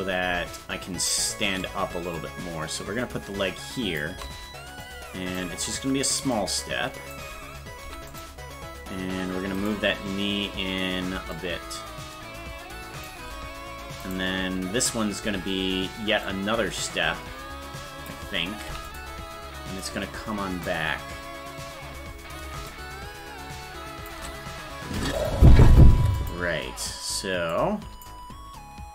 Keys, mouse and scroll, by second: 0.6 click, 2.1-4.0 shift+drag, 4.8 click, 6.3 click, 7.8 i, 9.6 right click, 11.3-13.1 shift+drag, 14.1 right click, 16.3-18.1 drag, 18.7 i, 19.8 click, 22.7-24.1 shift+drag, 24.9 i, 26.2 click, 27.5 click.